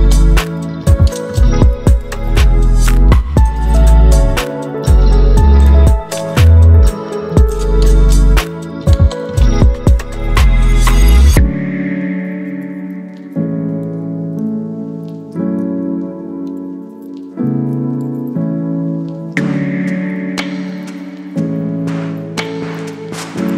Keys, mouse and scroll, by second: 0.8 Right, 4.3-8.2 drag, 8.9 ctrl+t, 9.8 right click, 11.3 click, 13.0-15.5 alt+drag, 20.2-21.1 drag.